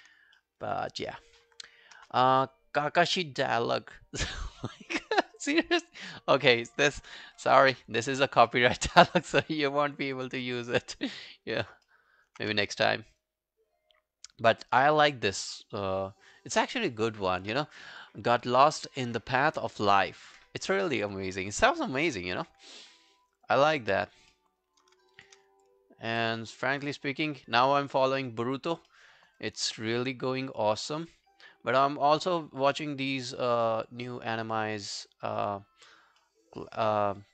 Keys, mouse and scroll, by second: 0.0 alt+click, 0.4 alt+middle click, 0.6 alt+right click, 5.8 right click, 7.4 ctrl+i, 8.1 alt+click, 8.5 alt+middle click, 8.7 alt+right click, 9.0 alt+click, 9.3 alt+right click, 9.6 alt+click, 10.1 alt+middle click, 10.4 alt+scroll down 1, 10.7 alt+click, 11.2 alt+middle click, 11.4 alt+scroll down 1, 11.5 alt+right click, 11.9 alt+middle click, 12.1 alt+right click, 12.4 alt+q, 12.6 right click, 14.7 right click, 16.8 alt+middle click, 17.1 alt+right click, 22.9 alt+middle click, 23.3 alt+right click, 23.6 alt+click, 24.3 alt+middle click, 24.6 alt+right click, 25.2 shift+click, 25.5 scroll down 1, 25.7 alt+click, 26.4 alt+middle click, 26.6 alt+right click, 26.9 alt+click, 28.9 alt+middle click, 29.2 alt+right click, 29.4 alt+click, 33.2 alt+middle click, 33.5 alt+right click, 33.7 alt+click, 34.1 alt+middle click, 34.3 alt+right click, 34.6 alt+click, 35.1 alt+middle click, 35.3 alt+right click, 35.5 alt+click, 36.2 alt+middle click, 36.5 alt+right click, 36.7 alt+click.